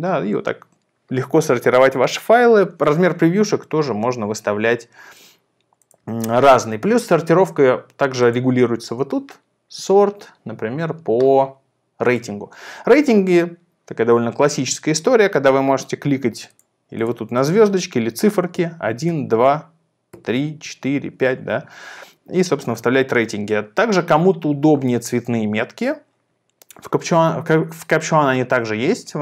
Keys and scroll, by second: 18.3-21.5 typing.